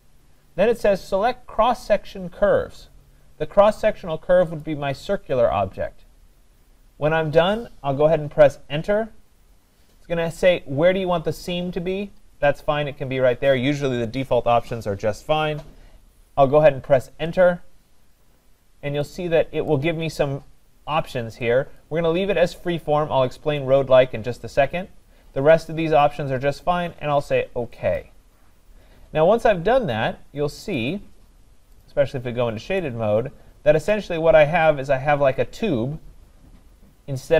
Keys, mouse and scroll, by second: 4.6 click, 8.8 Return, 17.1 Return, 19.7 click, 21.8 click, 28.0 click, 30.8 click, 31.8 click, 36.3 click.